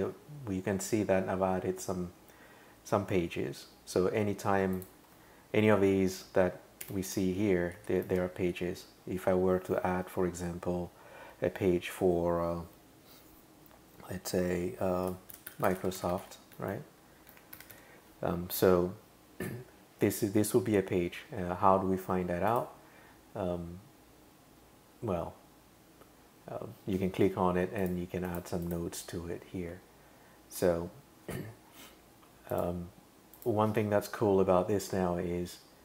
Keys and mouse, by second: 4.8 click, 6.8 Return, 7.8 Up, 8.1 Tab, 15.1-18.0 typing, 22.5 click, 27.8 click, 28.3 click, 28.6 click, 30.6 super+[, 32.5 click, 33.4 click.